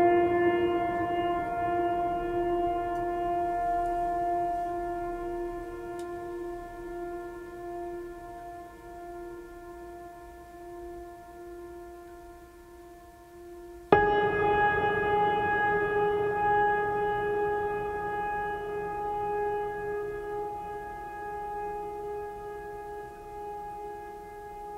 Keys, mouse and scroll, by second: 0.6 right click, 1.4 right click, 3.2 right click, 4.6 right click, 14.0 right click, 22.7 right click.